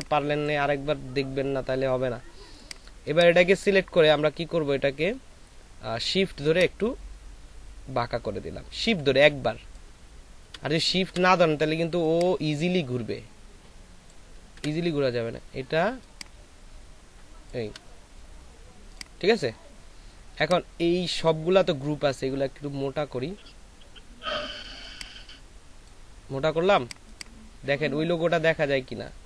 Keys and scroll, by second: 11.1 ctrl+shift+z, 14.6 ctrl+z, 15.2 ctrl+shift+z.